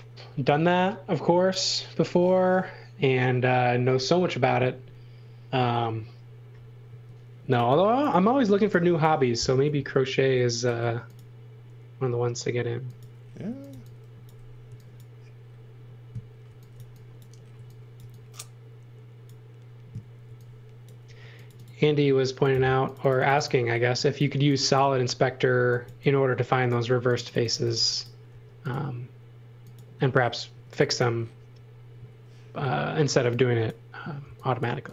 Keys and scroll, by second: 1.9 space, 4.4 s, 6.8-9.1 typing, 13.2-14.6 typing, 16.4 x, 16.7 v, 17.5 x, 17.9 v, 20.2 x, 21.0 space, 23.7 e, 25.3-28.3 typing, 29.9 space, 30.5 space, 32.6 x, 33.0 space, 34.2 x, 34.7 v.